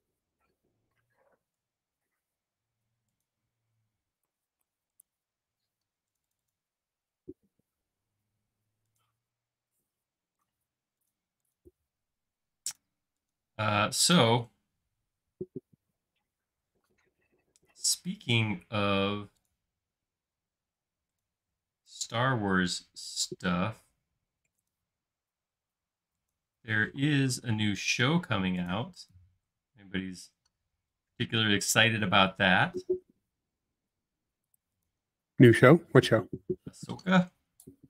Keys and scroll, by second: 16.8 m, 26.9 m.